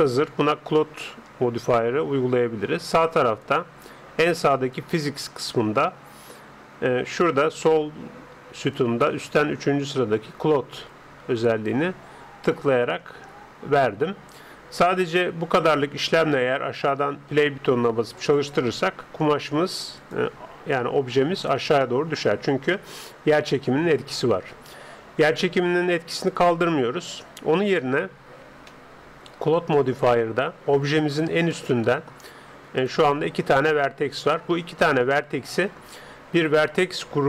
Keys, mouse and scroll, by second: 4.7-6.6 drag, 11.4-13.2 drag, 18.2-23.0 drag, 27.8-31.0 middle drag, 31.0 Tab, 31.7-33.2 middle drag, 32.8-35.2 right drag.